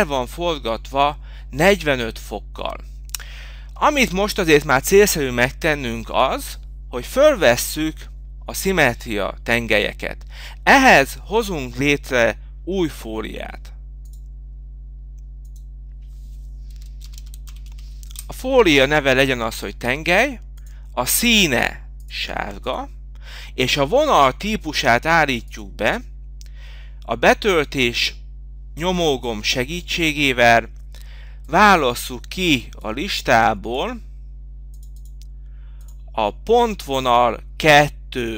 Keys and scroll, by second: 14.6 v.